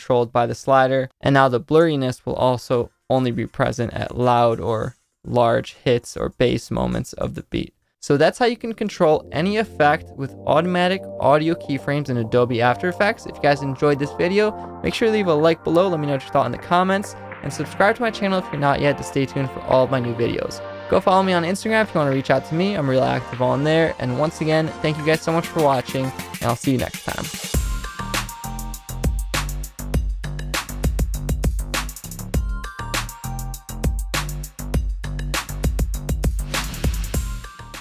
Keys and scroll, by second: 1.0 space, 1.7 space, 8.2 space.